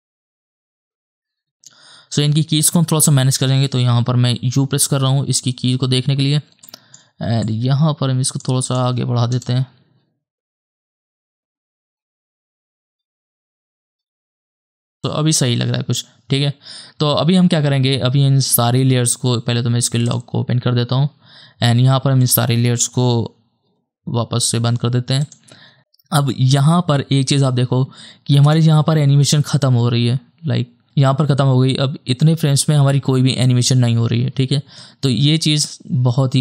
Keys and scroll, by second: 1.7 space, 4.8 u, 9.4 KP_0, 14.7 space, 23.8 u, 28.5 KP_0.